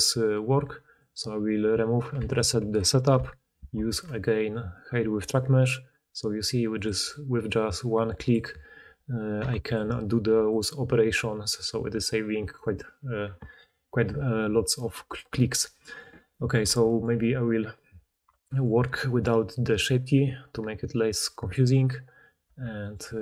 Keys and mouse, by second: 3.6 ctrl+shift+h, 14.6 click, 14.6 middle click, 14.6 right click, 16.6 Tab, 17.0-23.2 drag, 17.0 r, 18.2 Tab, 22.4 Tab, 23.0 g.